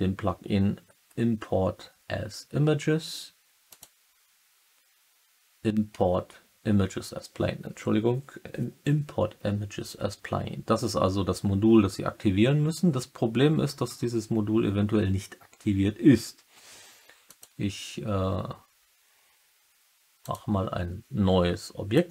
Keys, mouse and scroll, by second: 3.6-22.1 drag.